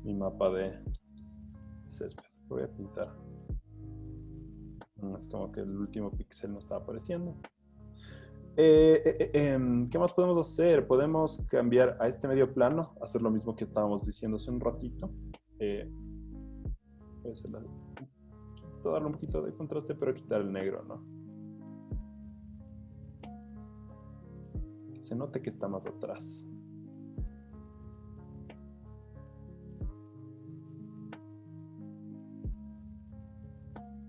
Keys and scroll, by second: 0.9 b, 6.4 z, 7.5 z, 8.2 z, 13.7 super+l, 18.2 1, 25.6 1.